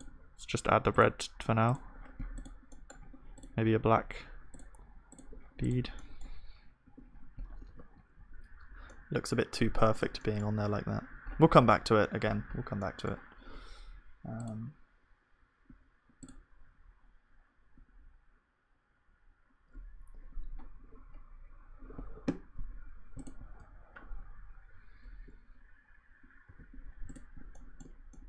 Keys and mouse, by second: 0.0-6.9 drag, 6.9 KP_1, 7.2 click, 7.7 ctrl+s, 9.0 middle click, 9.1 right click, 9.6-23.4 middle drag, 10.2-11.9 drag, 10.2-11.9 right drag, 23.4-26.5 drag, 26.5 ctrl+s, 26.8-28.2 middle drag, 27.5-28.2 drag.